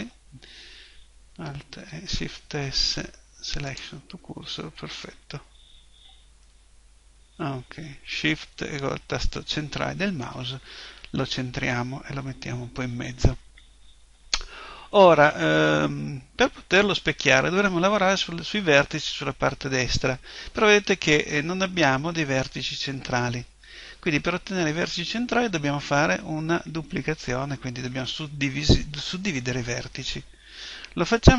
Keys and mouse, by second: 1.9 shift+s, 6.4-31.3 middle drag.